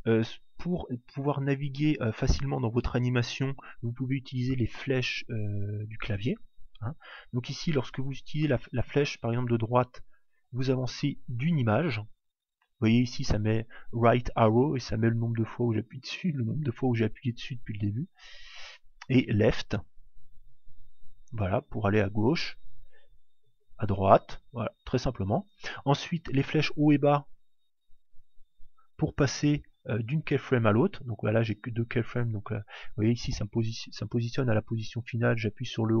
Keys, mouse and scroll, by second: 4.7 click, 8.6 Right, 17.3 Left, 17.5 Left, 20.1 Left, 23.0 Right, 24.3 Left, 24.6 Left, 27.1 Up, 28.2 Up, 30.9 Down, 31.5 Up, 31.9 Down, 35.5 Up.